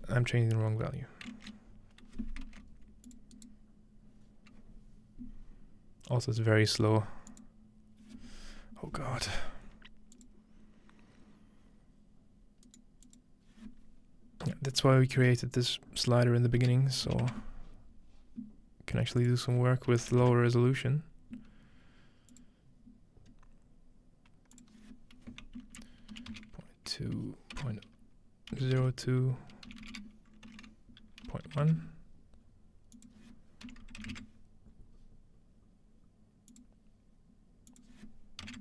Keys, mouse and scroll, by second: 3.1 click, 7.3 click, 10.1 click, 10.9-12.0 drag, 12.6-14.3 right drag, 13.0-14.3 drag, 15.2 typing, 16.6-17.7 typing, 19.2 click, 22.3 click, 23.3-24.2 scroll up 2, 24.2-25.6 scroll up 1, 24.6-26.2 drag, 26.3 typing, 27.5-29.1 typing, 29.7 Left, 31.2-32.1 typing, 32.9 click, 36.5 click, 37.7 click.